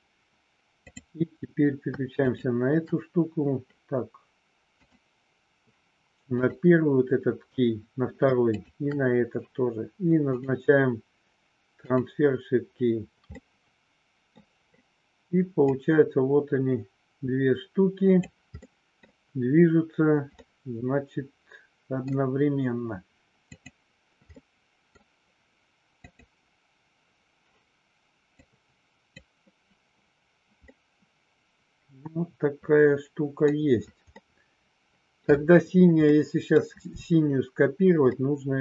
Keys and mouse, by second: 2.2 shift+click, 4.7 click, 8.5 shift+click, 10.4-12.0 drag, 13.4 middle click, 15.8-18.4 drag, 18.5 middle click, 20.4-22.0 middle drag, 23.6 click, 24.4 middle click, 25.8 click, 28.5 click, 30.7-33.5 middle drag, 34.2 middle click, 36.1 middle click, 38.1 middle click.